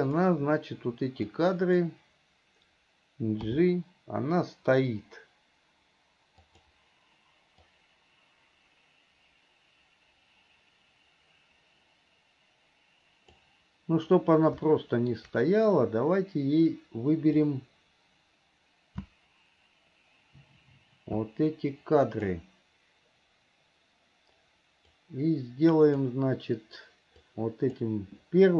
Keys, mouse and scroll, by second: 0.3 click, 1.5 click, 7.9-13.7 drag, 14.9 shift+middle click, 17.7-22.6 drag, 25.1-26.1 drag, 27.4 click.